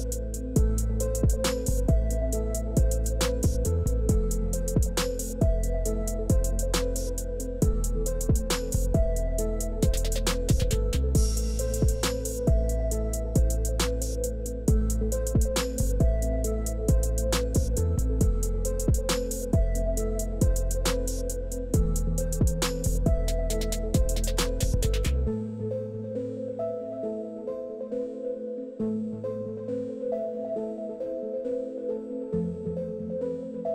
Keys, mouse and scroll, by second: 0.9 middle click, 1.9 click, 3.1 click, 6.8 click, 7.4 click, 9.0 click, 9.4 click, 10.2 click, 11.0 click, 11.8 KP_4, 12.1 Return, 15.5-23.8 middle drag, 28.9 click, 31.1-33.7 middle drag.